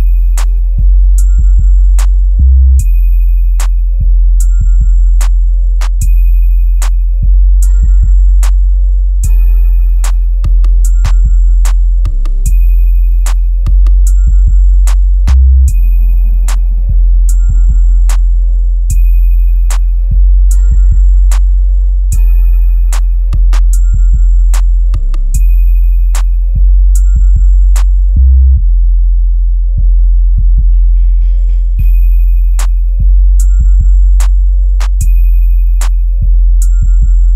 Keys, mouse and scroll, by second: 0.7-1.5 typing, 2.0 Return, 4.3 ctrl+z, 6.9-10.3 drag, 9.2 click, 10.3-11.9 typing, 12.1 click, 13.2 typing, 14.2-15.0 typing, 15.6 Return, 16.9 click, 17.5-18.0 scroll down 1, 18.0 click, 18.8-20.0 scroll up 1, 23.3-25.5 drag, 25.5 right click, 29.2 click, 31.7 ctrl+q, 33.5-36.8 drag.